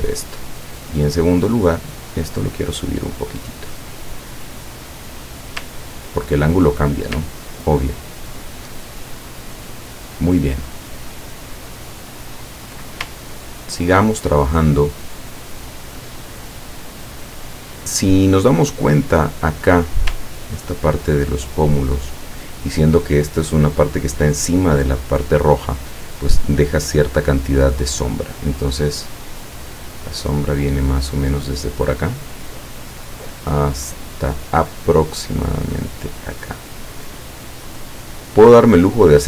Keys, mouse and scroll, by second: 2.2-5.4 drag, 5.8-6.2 ctrl+scroll down 2, 9.7 ctrl+scroll up 2, 10.5 ctrl+scroll up 2, 11.1 ctrl+scroll down 2, 12.4 ctrl+middle click, 13.4 ctrl+middle click, 19.7 click, 20.6 ctrl+scroll up 2, 21.2 ctrl+middle click, 22.8 ctrl+scroll down 2, 30.1 click, 34.9 click, 37.0 click, 37.7 click, 38.3 click.